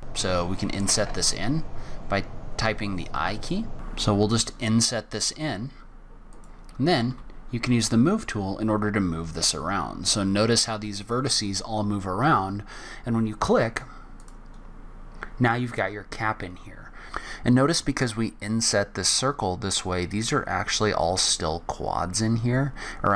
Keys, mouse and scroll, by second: 0.1-0.8 scroll down 5, 0.8 i, 7.1 g, 14.5-15.5 scroll up 4, 15.5 scroll down 1, 16.2-16.6 scroll up 1, 16.6-17.0 scroll down 1.